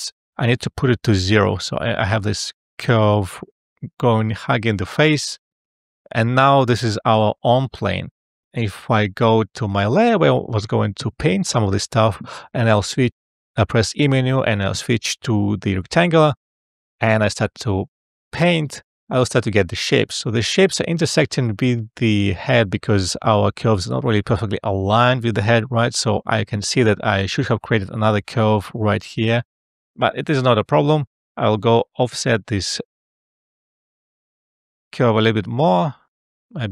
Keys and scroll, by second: 1.4 0, 1.7 Return, 12.9 e.